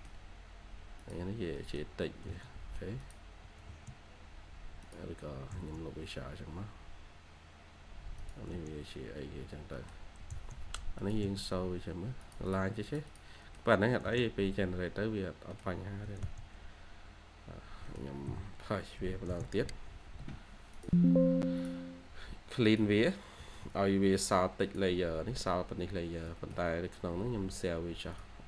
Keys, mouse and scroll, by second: 0.5 Escape, 1.5 middle click, 2.0 typing, 4.2 scroll up 1, 4.5-6.7 typing, 5.9-6.2 scroll down 1, 6.3-6.7 scroll up 1, 8.0-8.8 typing, 9.4 scroll down 1, 9.6 middle click, 10.1-10.7 typing, 10.5 scroll up 1, 11.9 scroll down 1, 12.3 scroll, 12.4 double click, 13.3 middle click, 13.8-15.9 typing, 14.3-14.8 scroll down 2, 15.4 middle click, 17.6 scroll down 1, 17.8 middle click, 18.2-18.9 typing, 23.3 middle click, 26.2 Escape, 26.4 Escape, 27.1-28.1 scroll down 1.